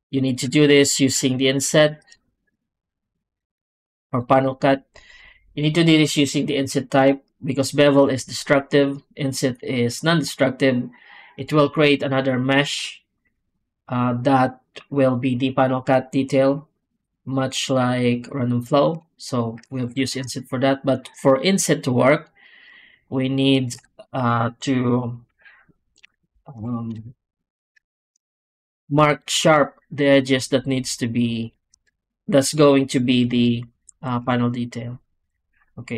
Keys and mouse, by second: 0.1 click, 0.7 shift+click, 1.2 shift+click, 1.6 shift+click, 2.1 w, 19.7 ctrl+z, 22.5 click, 26.6 shift+click, 27.8 shift+click, 28.7 alt+a, 28.9 click, 29.9 ctrl+click, 30.8 ctrl+click, 31.3 ctrl+click, 31.9 shift+click, 32.4 shift+click, 34.2 shift+click.